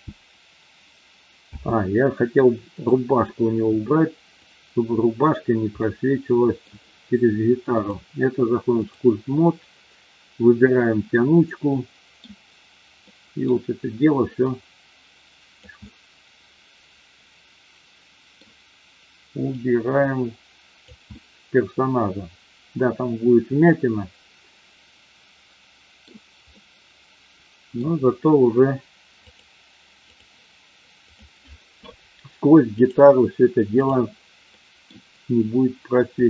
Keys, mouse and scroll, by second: 1.4 space, 5.7-6.6 middle drag, 7.8-9.1 drag, 10.8-12.2 middle drag, 13.1 middle click, 14.5-15.6 drag, 15.8-18.5 middle drag, 19.6-21.0 drag, 21.2-26.1 middle drag, 26.6-27.8 middle drag, 29.3 click, 32.6-34.0 drag, 34.4 middle click, 36.1 click.